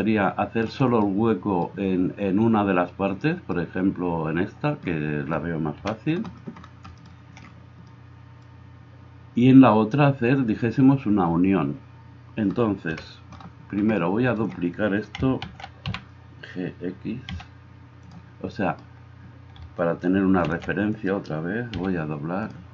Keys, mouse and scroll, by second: 5.8 KP_1, 13.0 KP_1, 15.5 shift+d, 20.5 shift+d, 21.8 g.